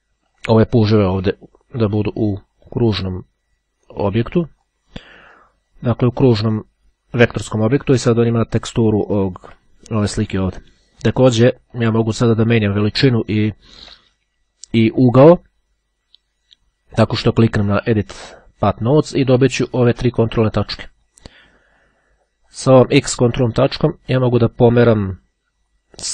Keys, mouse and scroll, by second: 0.4 click, 4.5 click, 5.5-6.6 drag, 8.3-8.7 ctrl+scroll down 2, 8.7-9.0 ctrl+scroll up 2, 11.8 click, 13.3-13.8 ctrl+scroll down 2, 23.1-26.1 drag.